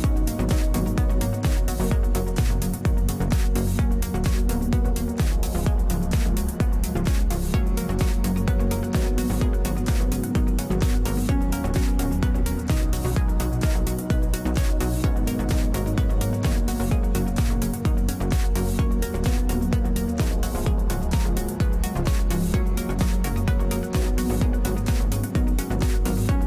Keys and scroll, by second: 6.4 ctrl+Delete, 12.0 ctrl+Delete.